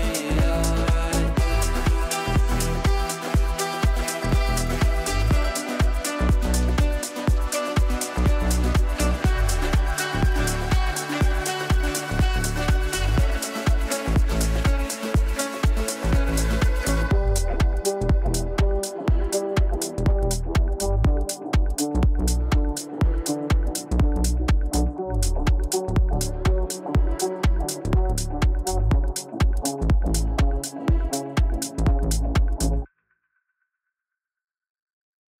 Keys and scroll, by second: 0.8 Up, 11.3 Delete, 17.2 g, 31.3 g.